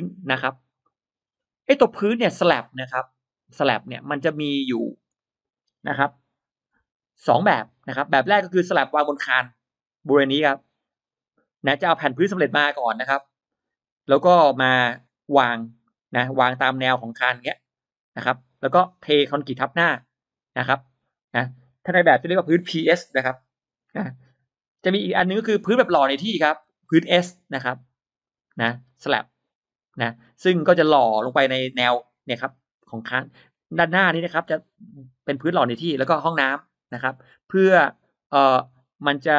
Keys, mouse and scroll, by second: 0.5 middle click, 0.9 scroll down 1, 1.1-1.8 scroll up 2, 1.6 middle click, 1.9-2.3 scroll down 2, 5.1 middle click, 7.6 shift+x, 8.5-15.5 shift+drag, 16.7 shift+click, 17.3 shift+click, 18.1 shift+click, 24.8 shift+right click, 26.3 shift+x, 26.7-28.1 drag, 28.7-30.4 shift+drag, 31.2-32.8 shift+drag, 33.6 shift+right click, 34.2 shift+x, 34.3-35.5 shift+drag, 35.4 right click, 35.8-36.9 shift+drag, 36.9 right click, 37.1-38.6 shift+drag.